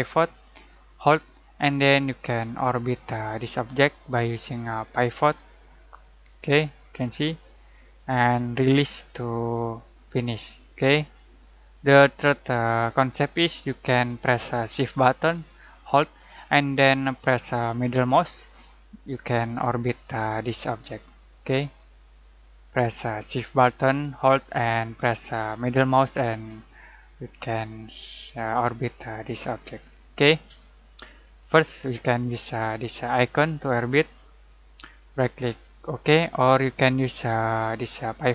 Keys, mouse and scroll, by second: 0.2-12.7 drag, 18.0-32.4 shift+middle drag, 33.2-35.1 drag, 35.1 right click, 35.8 click.